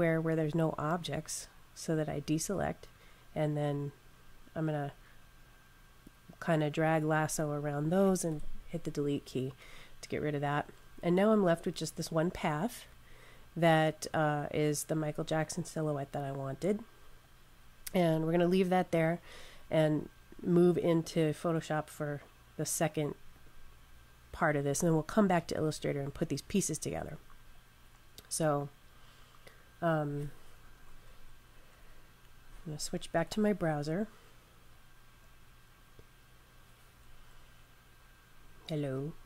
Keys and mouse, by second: 0.9 click, 5.9 click, 11.3 click, 23.2 click, 30.8 super+Tab, 31.8 super+Tab, 32.8 super+Tab, 36.9 super+Tab.